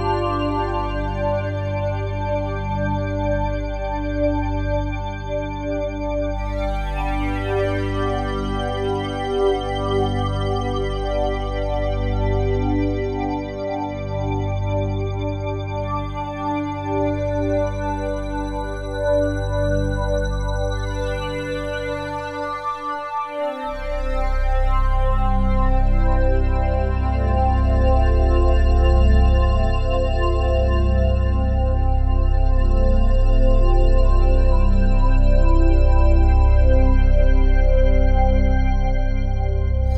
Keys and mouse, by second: 1.2 click, 1.5 click, 2.4 typing, 4.2 click, 4.9 click, 5.5 click, 6.3 typing, 6.7 click, 7.3 click, 8.3-9.3 drag, 10.0-11.3 drag, 12.0 click, 13.0-16.0 drag, 16.4 click, 17.2-19.0 drag, 19.8-20.9 alt+drag, 21.9 click, 23.3-24.8 drag, 27.0 click, 30.6 click, 31.8 click, 33.3 click, 37.6 ctrl+s, 39.3 click.